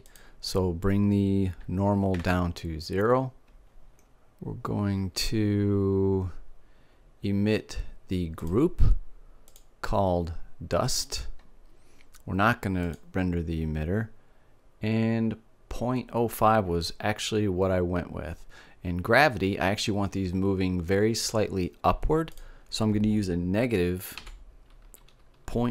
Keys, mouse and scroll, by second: 0.6-2.4 drag, 2.4-4.4 middle drag, 9.0-12.0 drag, 12.3-13.4 middle drag, 13.4-15.4 drag, 15.4-20.7 middle drag, 22.9-24.8 drag.